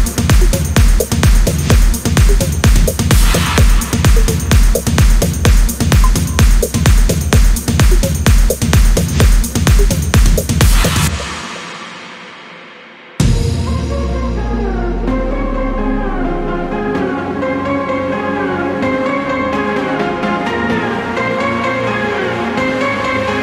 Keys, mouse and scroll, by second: 0.6 scroll down 1, 1.5 click, 4.3 0, 5.8 0, 7.1-9.1 typing, 9.3 scroll down 1, 9.8-10.2 scroll up 1, 10.8 0, 11.2 scroll down 1, 11.8 scroll up 1, 13.8 click, 15.2 ctrl+click, 16.6-18.8 drag, 19.8 click, 21.0-23.4 drag.